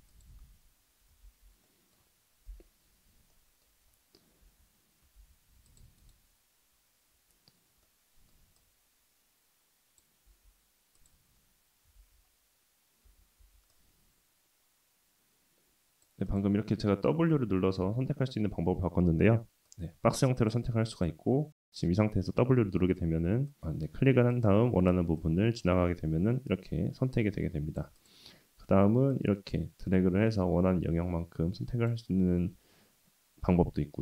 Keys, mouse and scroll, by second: 1.2 ctrl+z, 1.6-1.9 middle drag, 2.5 /, 3.3 middle drag, 3.7-4.4 scroll down 2, 4.4 Tab, 5.2 ctrl+r, 7.8 middle click, 8.6-10.0 drag, 10.3 x, 11.9 ctrl+z, 13.0 w, 13.4 w, 13.7-16.0 drag, 16.3 click, 17.3 w, 17.8 w, 19.7 click, 21.6 w, 22.5-24.2 drag, 24.4 w, 25.2-27.8 drag, 28.0 click, 28.6 w, 29.1-31.9 drag.